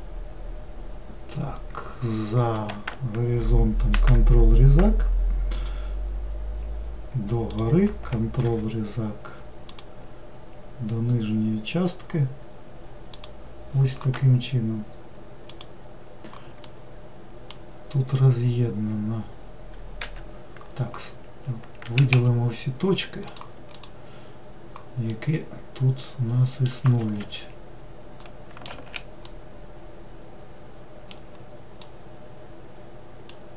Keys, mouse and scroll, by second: 4.0 ctrl+r, 8.4 ctrl+r, 16.7-18.0 middle drag, 18.0-19.3 scroll up 2, 19.3 scroll down 1, 20.1 1, 22.1 a, 23.3 click, 23.7 click, 25.1-27.2 middle drag, 27.2 alt+x, 28.3-28.7 middle drag, 28.7 alt+z, 29.3-31.9 middle drag, 31.9 click.